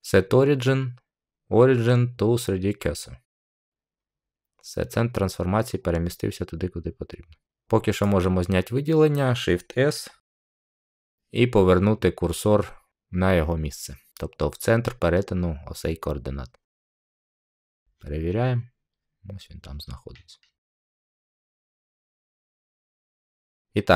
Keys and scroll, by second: 10.3 s.